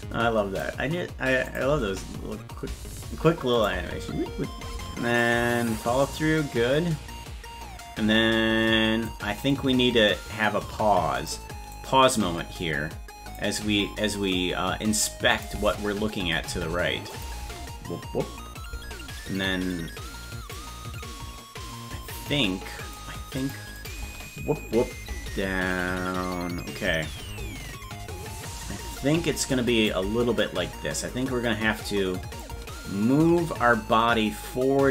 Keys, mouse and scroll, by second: 1.5 click, 1.7 space, 3.5 click, 3.7 space, 5.2-9.0 drag, 9.5-11.3 drag, 11.7-13.3 drag, 15.3 click, 15.5 space, 17.1 click, 17.4 space, 20.6-22.9 drag, 23.4 click, 23.8 click, 24.0 space, 28.9 click, 32.4-34.9 drag.